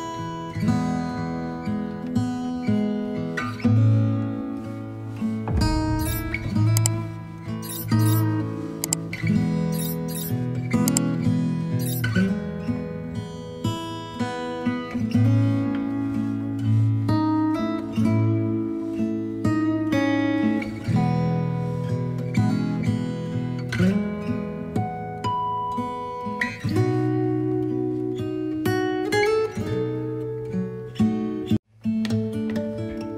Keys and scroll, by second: 1.5 b, 2.1 x, 2.7 ctrl+d, 10.3 ctrl+i, 10.8 b, 12.0 alt+space, 13.7 x, 15.2 space, 21.3 v, 32.2 b.